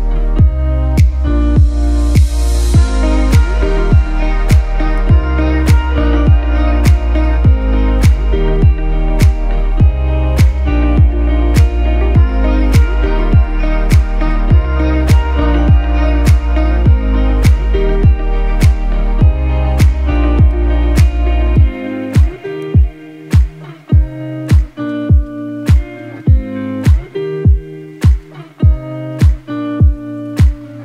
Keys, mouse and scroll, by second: 10.0-11.5 alt+shift+drag, 15.4 scroll down 1, 15.7-16.9 scroll up 1, 16.9-18.7 scroll down 1, 18.7-19.2 scroll up 1, 19.2 click, 19.8 ctrl+z, 22.8 click, 28.2 right click, 29.4 click.